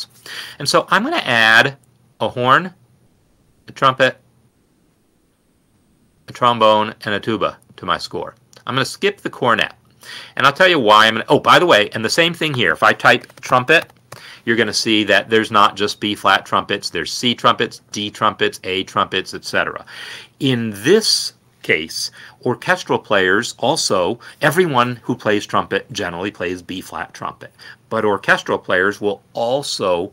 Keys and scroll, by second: 13.5-15.1 typing.